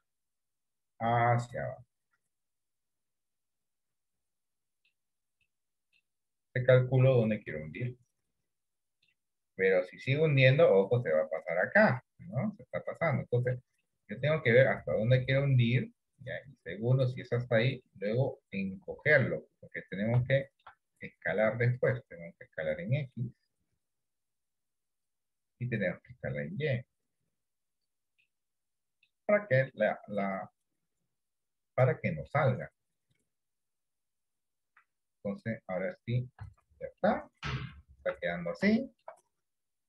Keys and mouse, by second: 0.0 e, 4.1 middle click, 5.5 middle click, 6.8 click, 7.9-9.2 middle drag, 10.5 click, 12.1-13.7 middle drag, 14.1 middle click, 15.2-17.2 drag, 18.0 middle click, 19.0 KP_7, 20.5 middle click, 21.7 click, 23.2-25.1 drag, 26.1-28.0 drag, 28.3 middle click, 29.9 middle click, 31.3 click, 31.7 middle click, 33.2-34.3 drag, 36.5 Tab, 37.1 middle click, 38.1 Tab, 38.8 shift+middle click.